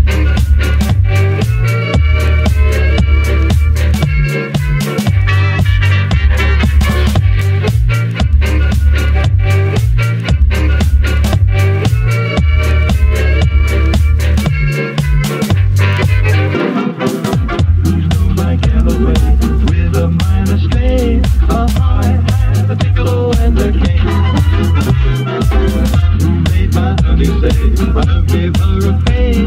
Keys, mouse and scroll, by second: 2.5 right click, 3.3-3.7 right drag, 4.4 click, 5.3 scroll up 4, 5.8-6.4 scroll down 5, 6.5-7.5 shift+middle drag, 7.5 scroll up 3, 7.8-13.5 middle drag, 13.5 n, 14.1 click, 14.2 n, 14.4 scroll up 3, 14.6-15.2 scroll down 3, 15.2-18.1 drag, 18.9 n, 19.3-20.2 scroll down 2, 20.2 g, 22.2 shift+Right, 22.6 g, 25.4 i, 25.7 shift+Left, 26.2 space, 28.1 space, 28.8 space.